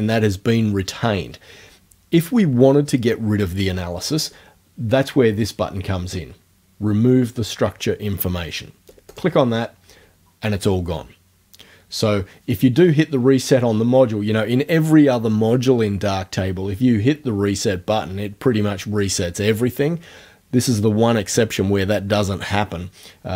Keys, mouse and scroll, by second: 9.1 click.